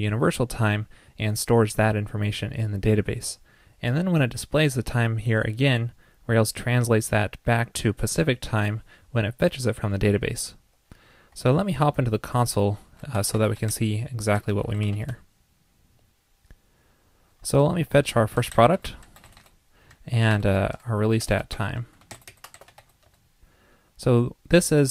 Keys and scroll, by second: 11.5 super+Tab.